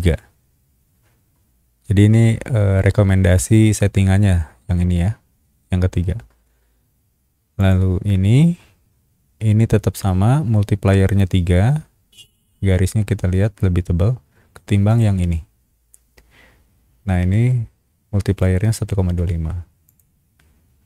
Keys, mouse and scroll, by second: 7.6 click, 14.9 click, 19.8 click.